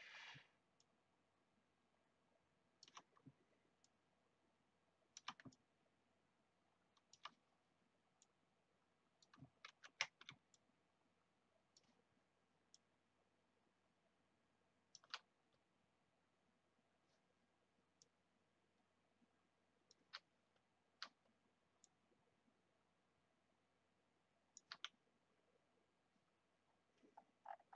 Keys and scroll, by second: 9.6 ctrl+z.